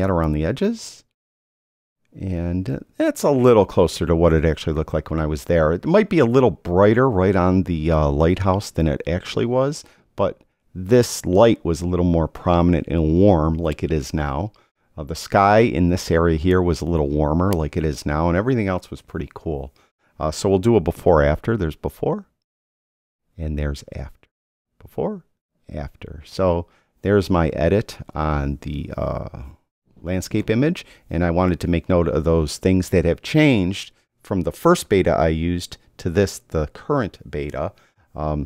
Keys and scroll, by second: 21.7 \, 24.5 \.